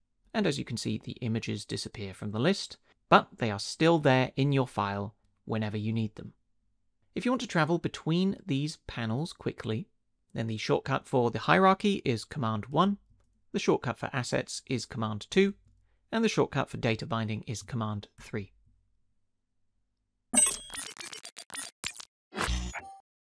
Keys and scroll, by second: 12.7 super+1, 15.3 super+2, 18.2 super+3.